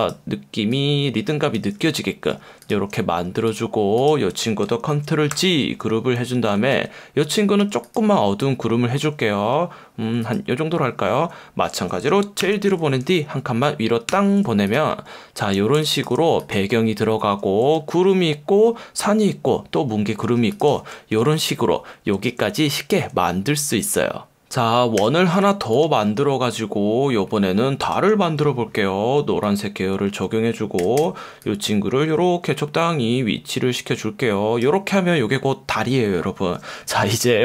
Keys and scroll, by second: 5.3 super+g, 6.7 F1, 7.6 F1, 12.4 shift+super+[, 14.1 super+], 15.6 space, 17.7 F1, 20.3 F1, 21.1 super+0, 22.1 super+-, 25.0 l, 30.5-31.5 typing.